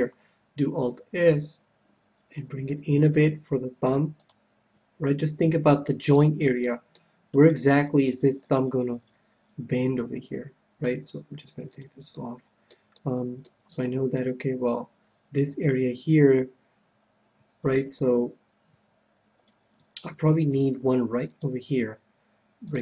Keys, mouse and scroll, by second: 0.7 alt+s, 1.3 alt+s, 4.2-6.0 drag, 6.2-9.9 middle drag, 11.6-13.4 drag, 12.1-14.6 middle drag, 20.7 ctrl+r, 22.7-22.8 drag.